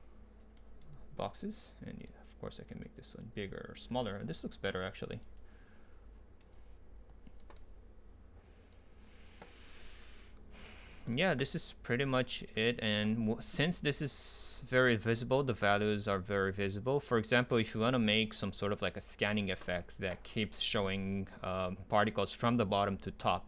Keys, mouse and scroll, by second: 0.9-2.1 drag, 3.1 middle click, 4.0-5.0 drag, 12.6-14.5 right drag, 17.1-18.3 drag, 18.3-20.5 middle drag, 21.0-23.2 scroll down 2, 23.2 scroll down 1.